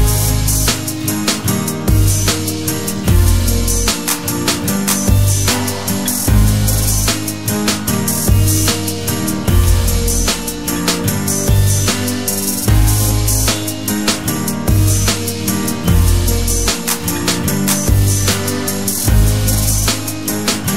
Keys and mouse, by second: 1.7 click, 3.1 click, 4.1 click, 5.9 middle click, 7.1-9.4 drag, 13.6 click, 18.7 click, 19.6-20.7 drag.